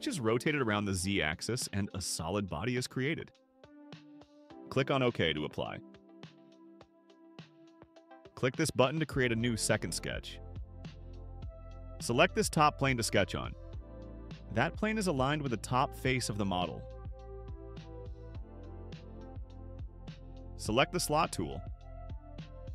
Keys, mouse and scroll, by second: 0.9-2.4 drag, 5.5 click, 6.7 click, 10.6 click, 14.1-16.1 drag, 17.1 click, 18.5-19.1 scroll up 3.